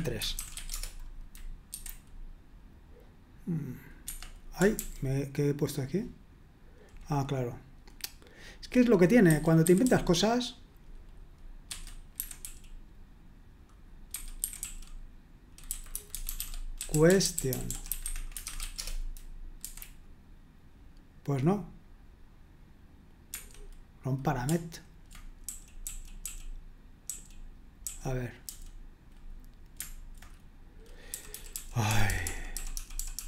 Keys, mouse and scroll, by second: 0.0-0.9 typing, 1.7 F5, 4.0 Escape, 4.8 ctrl+u, 9.1-10.3 typing, 11.5-18.9 typing, 19.6 F5, 23.3 Escape, 25.5-28.4 typing, 31.1-33.2 typing.